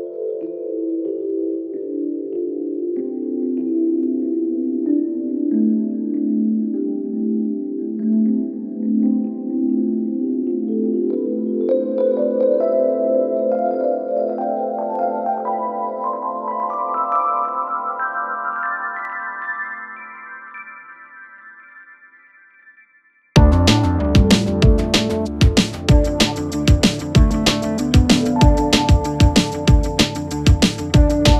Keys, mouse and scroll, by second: 1.8 space, 5.0-5.9 click, 8.1 alt+], 10.3 click, 12.6-13.6 click, 21.5 u, 22.3-24.0 click.